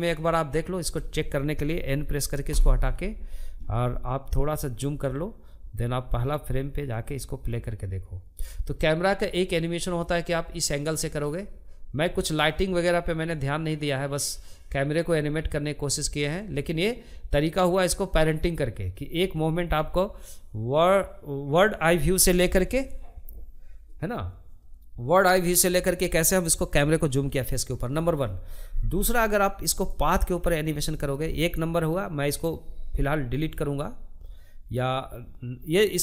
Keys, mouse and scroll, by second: 0.9 n, 2.8-4.4 scroll up 2, 4.4 scroll up 1, 4.6-8.3 drag, 28.2-36.0 drag.